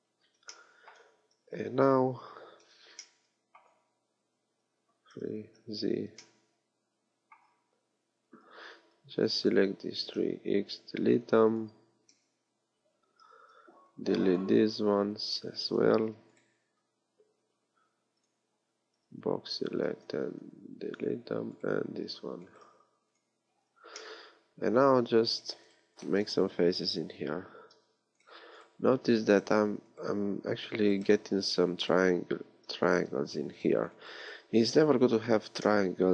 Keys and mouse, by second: 1.4 a, 4.5 KP_3, 5.4 z, 8.0 KP_3, 8.5 b, 10.5 x, 12.3 z, 13.7 b, 15.0-17.4 typing, 18.9 b, 20.5 x, 22.0 b, 22.7 x, 27.4 f, 30.3 f, 32.1 f, 33.2 f, 34.4 f.